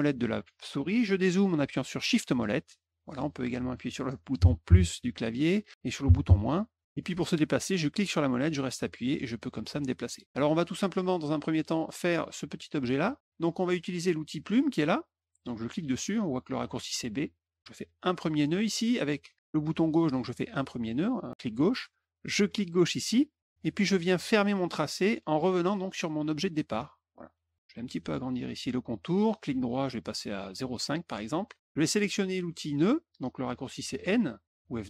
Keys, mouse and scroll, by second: 0.0 middle click, 2.2 shift+middle click, 2.7 shift+middle click, 7.8-9.7 middle drag, 10.1 middle click, 10.4 middle click, 10.8 middle click, 11.1 middle click, 17.3 click, 18.1 click, 22.9 click, 29.2 right click, 30.5 click.